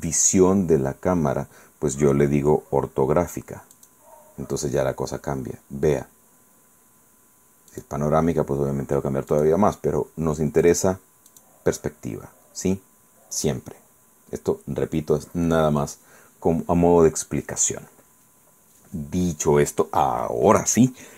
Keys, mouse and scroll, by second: 3.8 click, 4.9-5.7 scroll up 4, 6.1 scroll down 2, 7.8 click, 9.4 click, 10.8 click, 11.4 click, 12.1 scroll down 2, 12.7 scroll up 2.